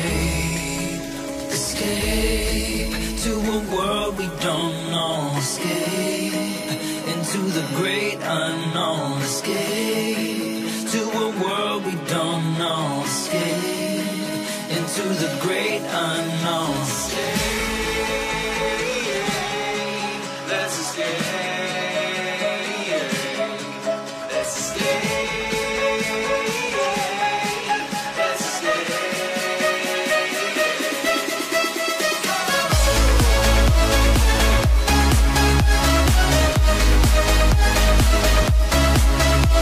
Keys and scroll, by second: 6.2 Tab, 28.6 Tab, 29.2 Tab.